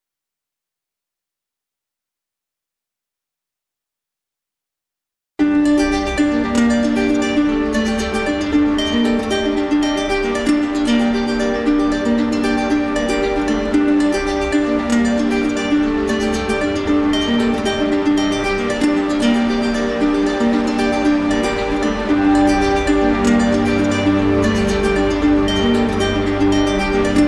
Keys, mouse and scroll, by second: 0.8 click, 1.3 click, 1.8 click, 3.1 click, 3.8 click, 4.2 click, 4.8 click, 5.2 click, 5.8 click, 6.1 click, 7.2 click, 7.6 click, 7.9 click, 8.6 click, 9.0 click, 9.5 shift+click, 9.9 click, 10.1 shift+click, 10.2 shift+click, 10.4 shift+click, 10.7 shift+click, 10.9 shift+click, 11.9 click, 12.6 ctrl+z, 13.7 click, 14.4 click, 14.9 click, 15.4 click, 15.9 click, 16.7 shift+click, 17.0 shift+click, 17.5 shift+click, 17.6 shift+click, 17.8 shift+click, 18.0 shift+click, 18.3 shift+click, 19.3 click, 19.6 click, 20.0 click, 20.7 shift+click, 20.8 shift+click, 21.0 shift+click, 21.2 shift+click, 21.5 shift+click, 21.7 shift+click, 22.0 shift+click, 23.2 shift+click, 23.5 shift+click, 23.7 shift+click, 24.1 shift+click, 24.7 z, 25.3 shift+click, 25.6-26.7 drag.